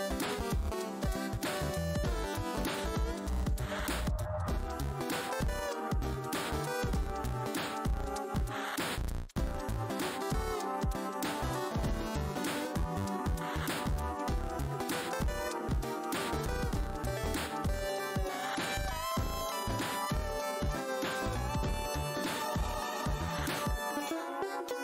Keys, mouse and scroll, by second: 0.1-0.5 scroll down 1, 1.9 alt+w, 2.8 space, 3.7 alt+click, 7.5 click, 7.9 w, 8.1 space, 9.9 shift+space, 9.9 x, 11.3 space, 11.8 alt+click, 13.2 alt+click, 14.8 alt+scroll down 1, 15.5 space, 16.3 alt+scroll, 16.8 alt+scroll down 1, 16.8 r, 20.4-21.1 typing, 23.5 shift+right click.